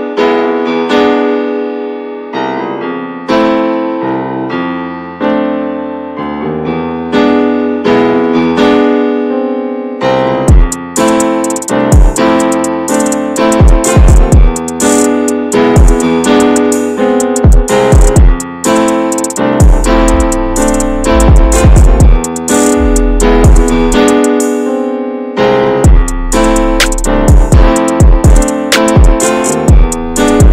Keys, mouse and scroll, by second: 0.0 click, 0.2-1.4 middle drag, 1.4 click, 1.7 click, 1.9-2.2 scroll down 1, 2.2 click, 2.5 shift+middle click, 3.4 click, 3.7 click, 3.8 click, 4.0-4.3 scroll down 2, 4.5 scroll up 1, 4.6-5.0 middle drag, 5.0 click, 5.1 shift+middle click, 5.2 scroll up 1, 5.4 ctrl+s, 5.8 shift+h, 6.3 click, 6.9 shift+middle click, 7.6 click, 8.2 scroll up 3, 8.3-9.8 shift+middle drag, 9.8-11.9 drag, 11.9-14.0 shift+middle drag, 14.0-21.5 drag, 21.5 scroll down 5, 21.8-30.5 drag.